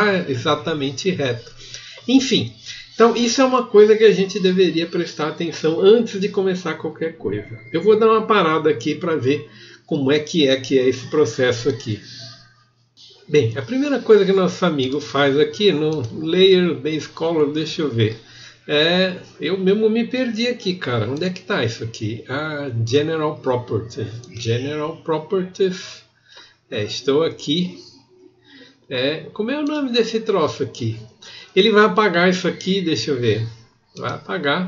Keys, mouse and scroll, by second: 21.2 click.